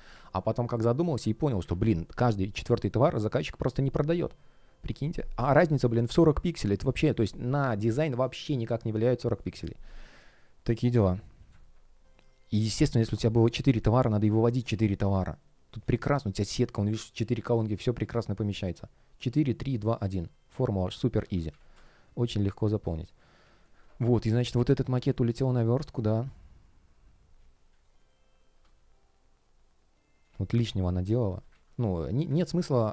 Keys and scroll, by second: 1.5 Delete, 9.7 space, 11.6 super+Left, 12.1 shift+p, 14.7 space, 16.1 shift+g, 21.0 super+z, 21.6 space, 22.7 space, 24.8 space, 27.7 shift+o, 28.5 space, 31.4 super+z.